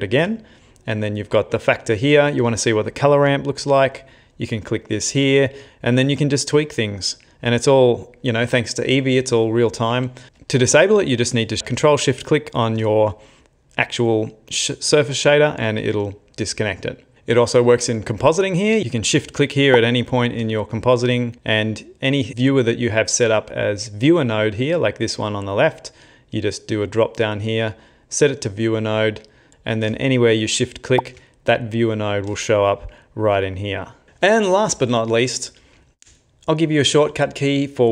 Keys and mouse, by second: 0.0 ctrl+shift+click, 1.5 middle click, 1.5 shift+middle click, 3.1 ctrl+shift+click, 5.8 click, 7.3 click, 10.3 middle click, 10.3 ctrl+shift+click, 10.3 middle click, 10.7 middle click, 12.3 ctrl+shift+click, 19.7 ctrl+shift+click, 21.3 ctrl+shift+click, 24.4 click, 29.4 click, 30.5 ctrl+shift+click, 33.0 ctrl+shift+click.